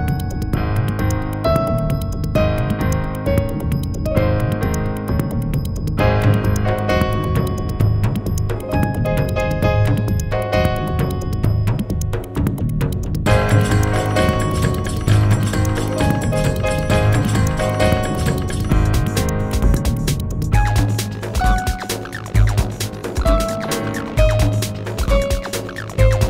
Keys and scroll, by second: 24.3 w.